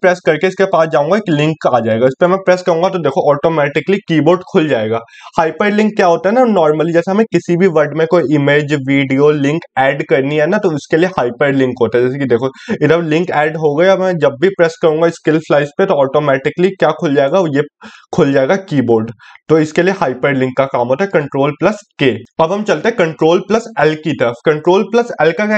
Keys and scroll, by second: 22.7 ctrl+l.